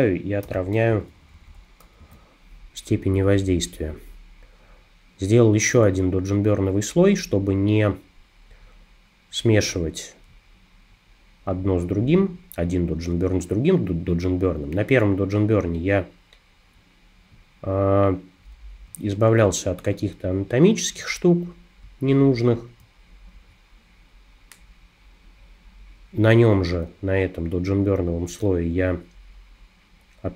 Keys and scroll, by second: 0.5 o.